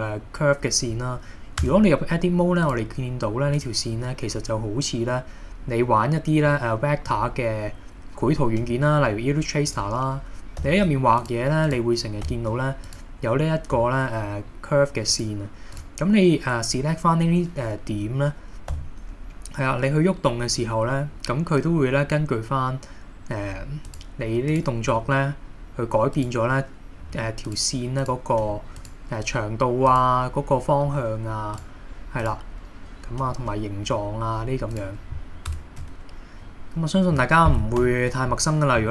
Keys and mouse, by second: 1.7 Tab, 2.6 click, 6.5-7.1 middle drag, 8.7 r, 9.7 click, 10.6 g, 11.2 click, 12.2 r, 12.9 click, 13.8 r, 15.1 click, 18.7 g, 23.9 click, 24.9 g, 26.2 click, 27.0 g, 27.5 click, 28.0 click, 28.4 g, 28.8 click, 29.9 click, 30.9 r, 31.6 click, 32.2 click, 33.3 r, 34.7 click, 35.5 Tab, 37.8 KP_7.